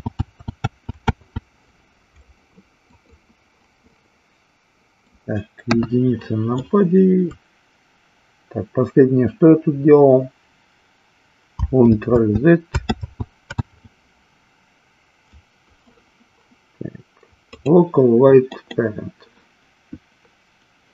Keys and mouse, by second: 4.0-5.1 middle drag, 17.4-18.8 drag.